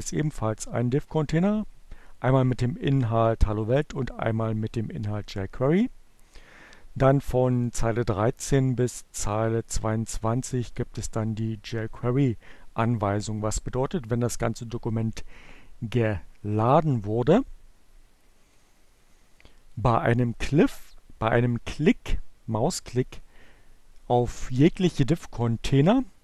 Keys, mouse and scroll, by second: 7.0 click, 8.4 click, 17.7-19.6 drag.